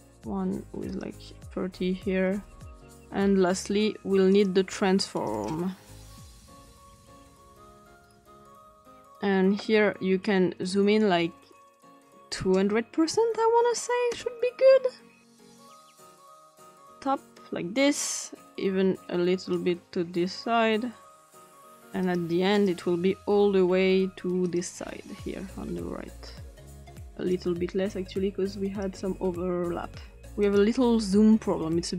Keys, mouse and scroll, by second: 0.9 click, 4.3 click, 5.1 click, 5.4 click, 6.0-6.6 typing, 7.3 click, 8.0 click, 8.6 click, 11.9 click, 13.1-14.3 typing, 14.1 Return, 16.4 click, 19.5-21.6 drag, 22.0 click, 22.5 click, 24.5 click, 27.3-28.8 drag, 30.4 click.